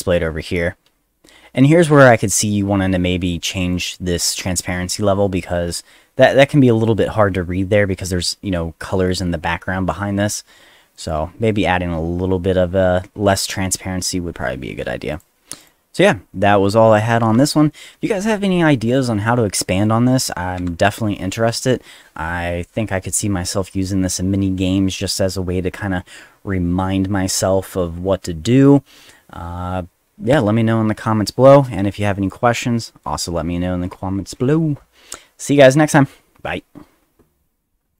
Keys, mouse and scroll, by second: 3.7 click, 3.8 click, 15.1 click, 15.6 click, 20.5 F2, 37.9 click.